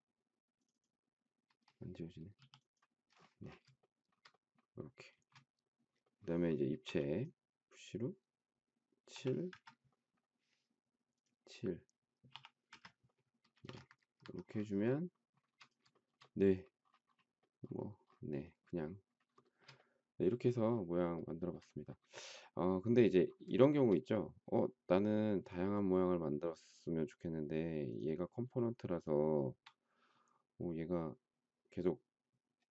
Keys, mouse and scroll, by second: 2.3 e, 3.8 shift+middle click, 5.1 space, 6.8 p, 8.9 7, 9.5 Return, 12.3 7, 12.6 Return, 13.5 space, 13.6 Escape, 13.8 Escape, 15.9 shift+middle click, 19.4 shift+middle click, 21.2 shift+middle click, 23.6 shift+middle click, 28.7 shift+middle click.